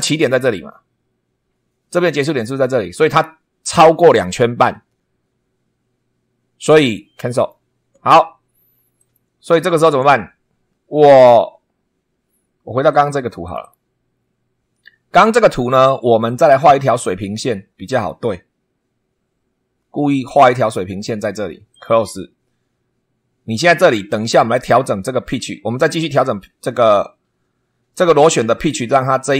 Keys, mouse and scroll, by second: 7.3 click, 9.0 click, 10.8 scroll down 1, 12.0 scroll up 1, 12.9 click, 13.4 click, 14.6 scroll up 1, 15.2 scroll down 1, 16.4 click, 17.9 click, 20.2 click, 21.7 click, 24.3 scroll up 1.